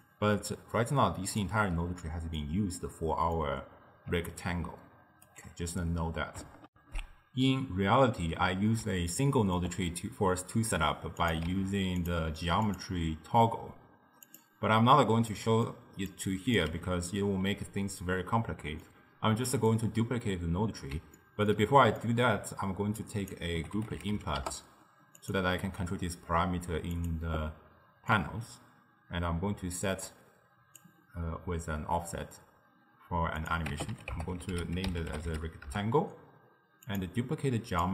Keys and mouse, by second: 1.5-4.2 middle drag, 4.2 d, 4.3-5.3 right drag, 5.3 d, 6.7 ctrl+alt+shift+w, 9.2-11.2 ctrl+middle drag, 11.2 click, 11.7 shift+d, 12.7-15.3 drag, 15.3-16.2 middle drag, 16.2 drag, 16.8 x, 18.0-23.1 middle drag, 23.1 drag, 27.0 click, 28.2-31.2 drag, 33.4-36.5 drag, 36.9-37.9 drag.